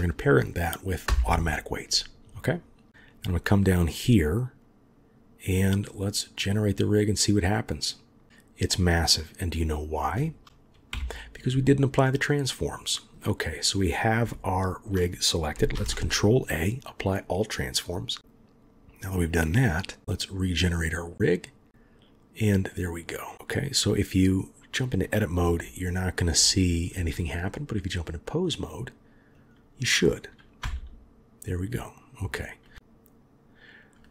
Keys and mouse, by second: 6.3 click, 10.9 Delete, 14.3-14.8 shift+drag, 15.7 ctrl+a, 19.3 click, 20.3 click, 22.7 click, 23.3 click, 23.3 r, 25.4 g, 28.0-28.5 drag, 29.4 click, 30.6 r.